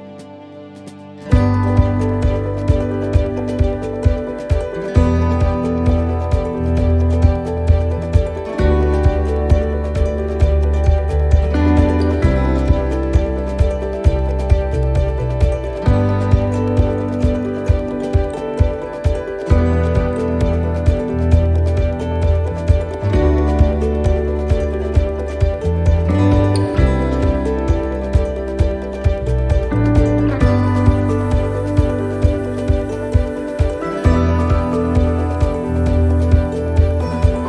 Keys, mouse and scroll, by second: 9.0 shift+scroll up 1, 9.0 shift+middle click, 13.2 shift+middle click, 16.7 shift+middle click, 18.0 shift+middle click, 19.3 click, 21.1 shift+middle click, 22.8 ctrl+r.